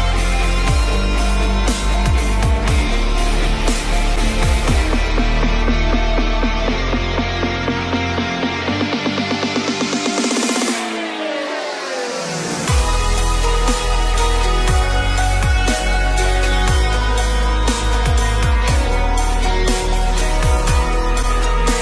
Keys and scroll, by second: 12.9 ctrl+g, 14.2 ctrl+alt+shift+e.